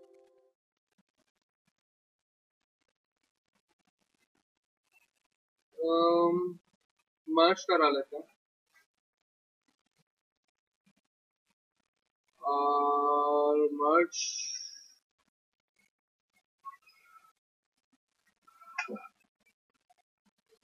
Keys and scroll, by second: 7.4 Escape, 7.8 Escape, 18.3 ctrl+v, 18.8 Return.